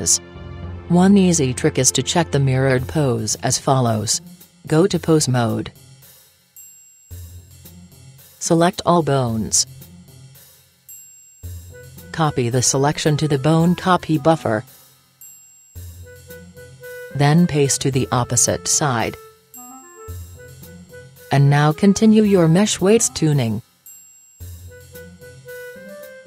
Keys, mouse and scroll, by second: 0.6 middle click, 0.7 click, 0.8 middle click, 0.9 click, 1.0 middle click, 1.1-2.3 drag, 2.1-4.6 middle drag, 4.6-5.6 scroll down 1, 5.6 Tab, 5.6 middle click, 7.7-9.5 right drag, 9.8 a, 10.2 a, 12.0-13.8 middle drag, 15.9-17.6 drag, 19.4-21.1 drag, 21.3 click, 22.1 a, 24.5-26.2 right drag.